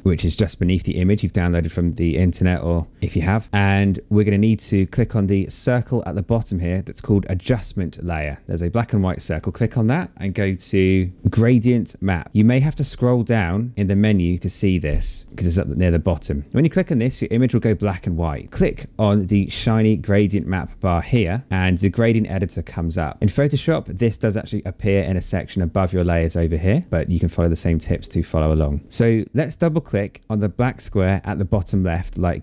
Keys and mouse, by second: 8.5 click, 11.8 click, 15.2 click, 21.0 click, 21.6 click, 27.7 click, 31.4 click.